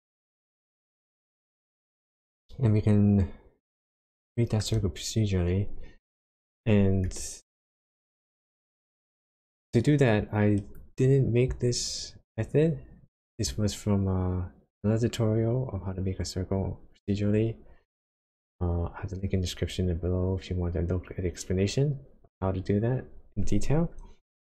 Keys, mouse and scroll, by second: 3.9 shift+middle click, 8.9 click.